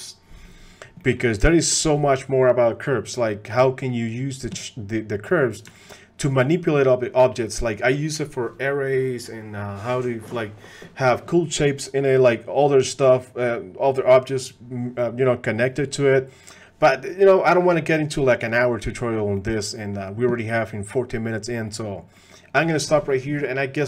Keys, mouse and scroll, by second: 1.0 middle click, 1.5 shift+click, 3.8 middle drag, 5.3 middle click, 5.7 shift+click, 11.9-12.3 middle drag, 16.4 middle click, 19.4 middle click, 19.8 click, 21.7 click, 22.2 click.